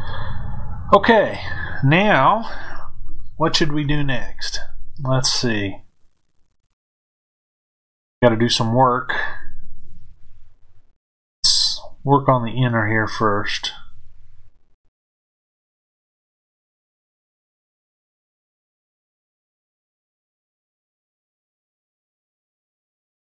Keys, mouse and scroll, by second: 12.5 click, 18.8-23.3 middle drag.